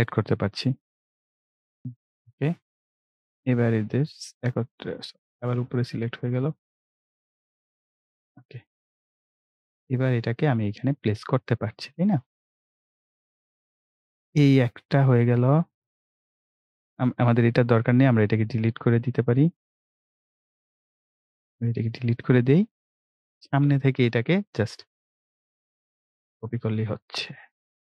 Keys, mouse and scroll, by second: 1.8 right click, 2.4-14.0 drag, 14.5-15.4 scroll down 1, 15.4 scroll up 1, 16.2-20.7 drag, 20.7 Delete, 21.8-23.5 drag, 23.5 Delete, 25.5-27.9 drag.